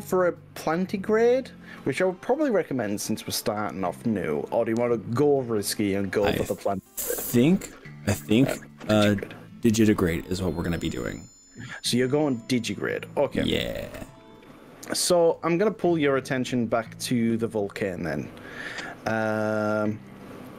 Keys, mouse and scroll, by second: 0.1-0.6 drag, 1.3-1.9 drag, 2.1-7.9 middle drag, 10.0-18.4 middle drag, 18.4 click.